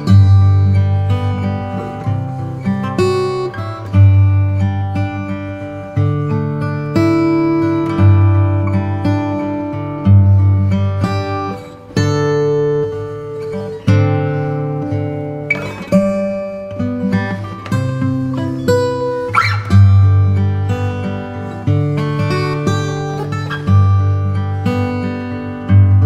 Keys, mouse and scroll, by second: 0.0-1.0 drag, 0.0 middle click, 0.1 right click, 0.4 alt+z, 0.4 alt+z, 0.6 middle click, 1.3 middle click, 3.1 click, 3.1 right click, 3.7-6.2 middle drag, 6.2 right click, 6.5-8.8 middle drag, 13.1 Tab, 13.1 Tab, 14.9-18.1 drag, 18.1 ctrl+r, 18.1 ctrl+r, 21.9 s.